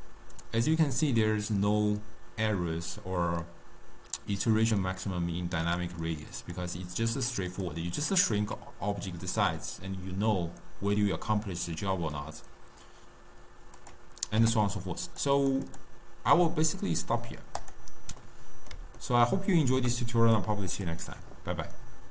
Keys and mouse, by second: 6.2-7.8 drag, 8.4-11.5 middle drag, 13.9 click, 14.5 u, 15.8-18.4 drag, 18.4-20.9 middle drag, 20.9 click.